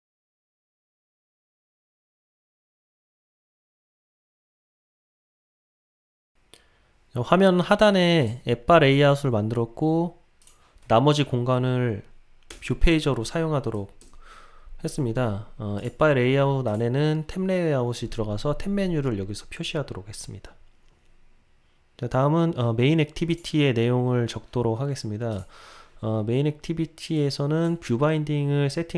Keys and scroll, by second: 0.8 Return, 2.0 Return, 3.4 Return.